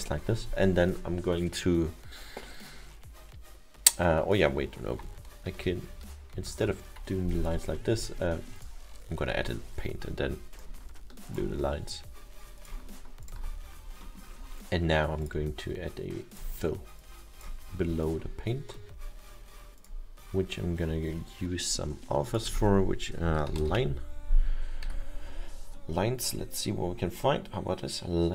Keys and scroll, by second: 5.5 ctrl+z, 5.9 ctrl+z, 8.4 ctrl+z, 23.3 l, 23.6 n, 24.9 s.